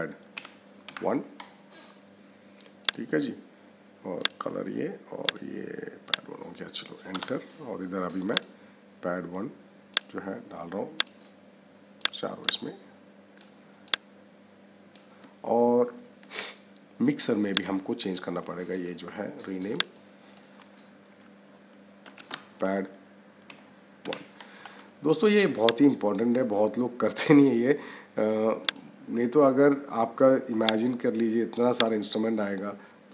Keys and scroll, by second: 7.0 Return, 21.9 p, 23.4 -.